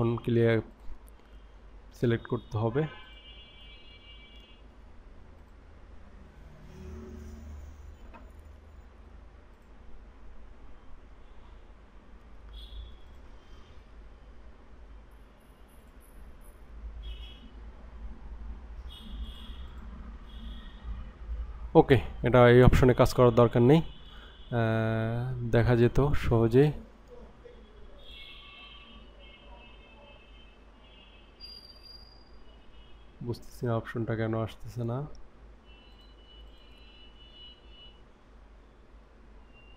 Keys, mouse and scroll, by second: 0.6-2.1 drag, 3.0-4.8 drag, 5.4-6.7 drag, 9.6 click, 11.0-11.8 scroll up 3, 11.8 scroll down 2, 13.0-13.5 drag, 15.8-19.3 drag, 19.6-21.6 drag, 22.2 scroll down 2, 22.8-23.6 scroll up 2, 23.6-24.2 scroll up 3, 25.8 click, 28.1-36.0 drag, 36.4-39.7 drag.